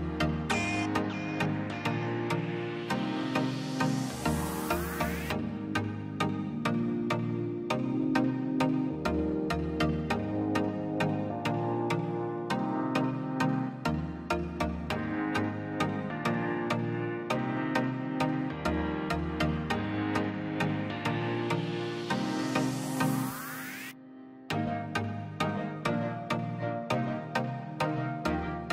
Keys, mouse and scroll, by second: 0.7 scroll down 1, 0.9 middle click, 1.9-4.1 drag, 4.9 Delete, 5.1 scroll up 1, 5.4 middle click, 5.8 click, 6.0 Delete, 6.2 scroll down 1, 6.5 middle click, 6.8 scroll up 1, 7.5 l, 8.0 click, 8.9 scroll down 1, 9.1 middle click, 9.6-10.7 scroll down 1, 11.0 scroll down 1, 11.1-13.1 middle drag, 13.1 click, 13.8 middle click, 14.6 space, 14.8 p, 14.9-16.2 drag, 16.2 click, 17.0 click, 17.4 scroll down 1, 18.0 space, 18.1 l, 19.4 click, 20.3 space, 20.6 p, 20.8 click, 21.5 scroll down 1, 21.7 middle click, 22.1-22.7 scroll up 2, 22.3 l, 22.7 click, 23.2 space, 23.3 scroll down 1, 23.5 middle click, 24.0-24.3 scroll up 1, 24.3 middle click, 24.9 scroll up 1, 25.6 click, 25.7 scroll down 1, 25.9 middle click, 26.1-27.0 scroll up 1, 27.5 click.